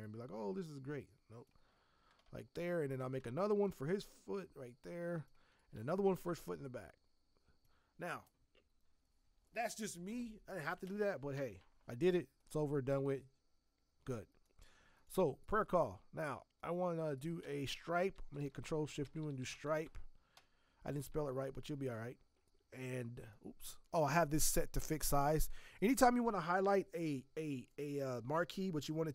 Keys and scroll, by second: 18.1 ctrl+shift+n, 18.8-20.3 typing, 21.9 m.